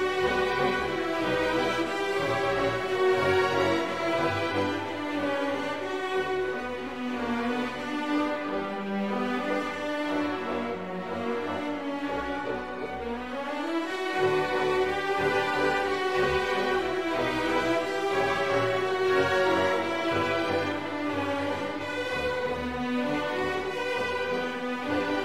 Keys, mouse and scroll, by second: 0.7 click, 1.6 1, 2.1 0, 3.3 click, 6.2 click, 7.5 1, 7.9 0, 8.6 scroll up 2, 9.6-11.1 drag, 18.8 click, 19.9 6, 20.3 0, 22.0 BackSpace, 22.5 0, 24.0 scroll down 2, 24.9-25.2 scroll down 2.